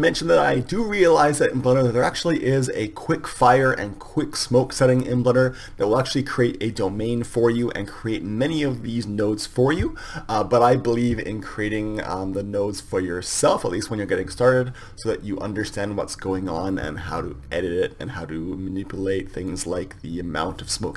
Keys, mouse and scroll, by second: 19.9-20.9 drag.